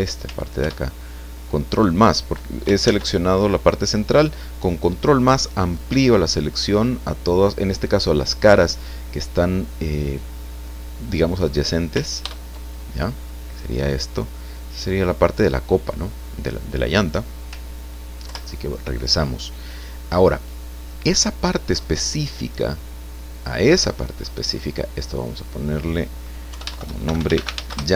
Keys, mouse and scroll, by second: 0.6 ctrl+KP_Add, 2.8 ctrl+z, 12.2 ctrl+KP_Add, 14.6-15.9 drag, 18.2 ctrl+Left, 23.3 click, 25.2 click, 26.5 Home, 27.0 shift+l, 27.2 shift+a, 27.4 shift+n, 27.5 shift+a.